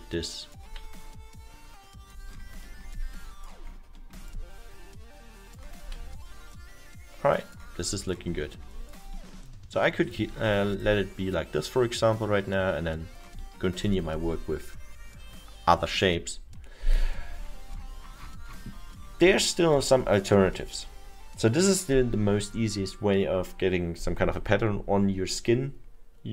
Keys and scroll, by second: 0.8 w, 6.6 w, 13.5 alt+8.